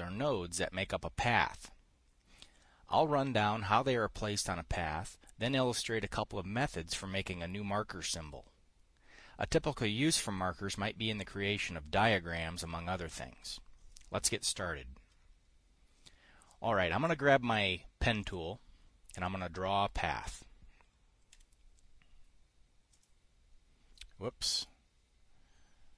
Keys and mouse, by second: 18.8 click, 19.6 click, 20.8 click, 21.9 KP_Decimal.